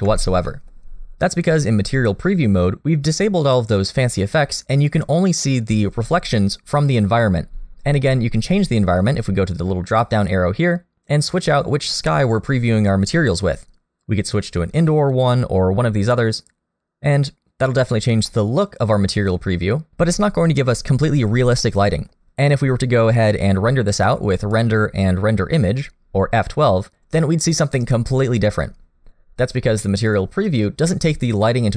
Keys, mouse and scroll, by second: 0.5 middle click, 0.8 scroll up 1, 9.9 click, 16.1 middle click, 18.3 middle click, 21.6 middle click, 24.4 click.